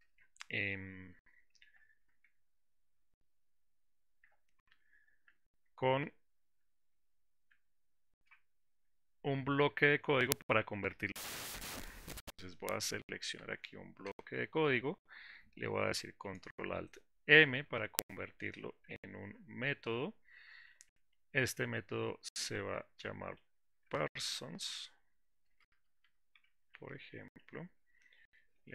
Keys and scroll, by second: 6.8 alt+shift+Down, 7.0 alt+shift+Up, 19.3 ctrl+alt+m.